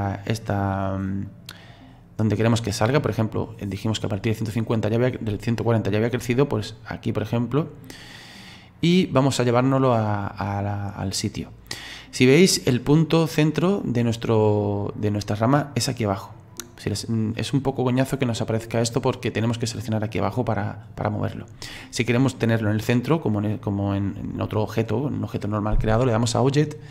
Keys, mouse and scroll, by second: 1.3-5.9 drag, 8.9 right click, 9.7-12.7 drag, 15.0 right click, 16.5 right click, 16.6 right click, 16.9 right click, 18.1-23.1 drag, 23.2 right click, 24.5 right click, 26.1-26.9 drag.